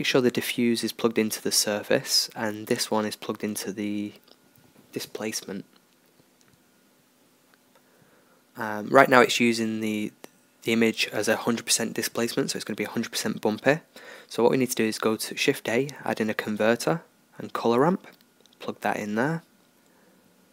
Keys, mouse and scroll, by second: 4.4-7.5 drag, 8.8-12.9 drag, 18.2-20.5 drag.